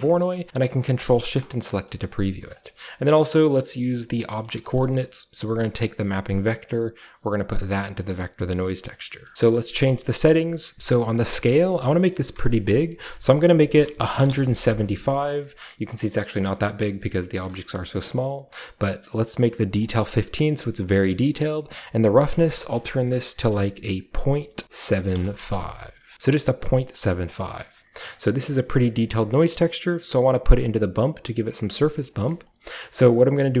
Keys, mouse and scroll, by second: 0.7-1.5 typing, 2.1-2.6 scroll up 1, 2.6-3.3 scroll down 1, 3.2-5.9 typing, 3.3-5.9 drag, 3.7 scroll down 1, 6.0-7.1 scroll up 1, 7.1-8.5 drag, 7.1-8.5 scroll up 1, 9.2-10.7 scroll up 1, 10.7-11.1 scroll up 1, 11.1 click, 13.0-16.3 typing, 15.2-17.7 scroll down 1, 16.3-17.7 middle drag, 17.9-19.7 scroll up 1, 17.9-19.7 middle drag, 19.8 click, 21.6 click, 22.0 click, 23.1-28.1 typing, 26.6 click, 27.1 click, 27.3-28.3 scroll down 1, 27.6-29.7 drag, 28.3-29.0 scroll up 1, 29.0 scroll down 1, 29.1 middle click, 29.7 middle click, 31.7-32.5 scroll up 1, 31.8-32.2 middle drag, 32.3-33.6 middle drag, 32.5 scroll down 1.